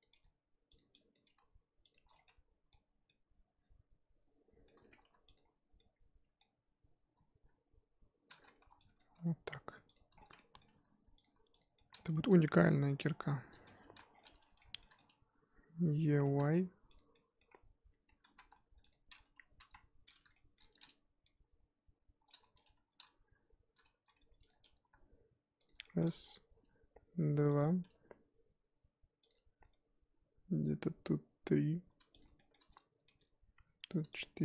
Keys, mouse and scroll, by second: 0.0 click, 0.1 g, 1.1 click, 1.2 g, 2.1 scroll down 1, 2.2-5.0 middle drag, 5.0 2, 5.3 click, 5.8-6.6 middle drag, 6.6 scroll up 3, 8.4 scroll up 3, 8.6 1, 9.0 click, 9.1 g, 10.1 scroll down 3, 10.3 middle click, 10.6 2, 11.2 click, 11.6 shift+click, 11.7 shift+middle click, 12.3 e, 13.8 ctrl+z, 14.1 scroll down 4, 14.2-16.2 middle drag, 16.2 e, 17.1 middle click, 17.5-18.3 scroll up 2, 18.3 z, 18.5 1, 18.9 click, 19.1 scroll up 3, 19.6 KP_1, 20.3 shift+middle click, 20.6-21.2 scroll up 3, 21.2 g, 23.9 g, 24.8 e, 25.8 shift+middle click, 26.2-26.5 scroll down 3, 26.5 e, 27.8 e, 29.6 g, 32.4-33.0 shift+middle drag, 33.0 g.